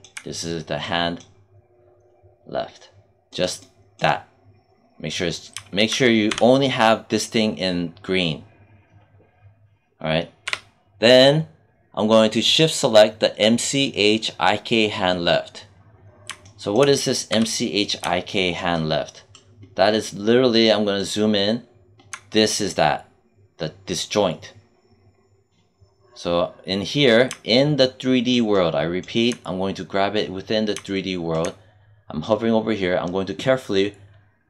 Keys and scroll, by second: 6.1 q, 10.3 w, 17.2 q.